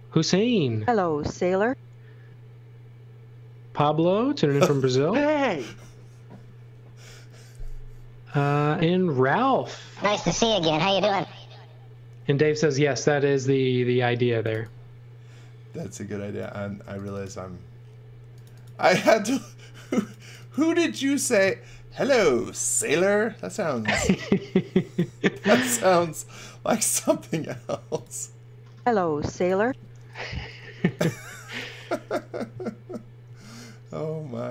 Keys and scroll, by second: 13.4-15.0 typing, 16.4 space, 26.3 m, 30.5-31.5 typing, 33.2 space.